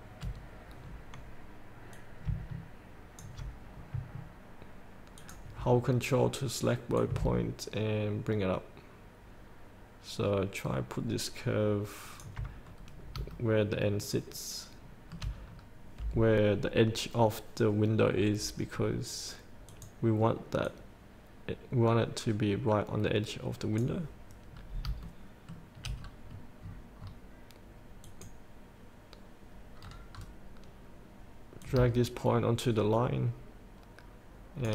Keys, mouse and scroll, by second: 0.7 scroll up 1, 2.2-4.2 drag, 5.4 ctrl+click, 7.1-12.6 drag, 12.9-13.4 scroll down 1, 13.6-15.5 shift+middle drag, 15.7-16.4 scroll down 1, 19.9-24.8 drag, 24.8 scroll down 1, 26.1 shift+scroll up 1, 26.2-28.2 scroll down 1, 28.2 click, 30.1-31.9 scroll down 1, 31.9-34.7 drag.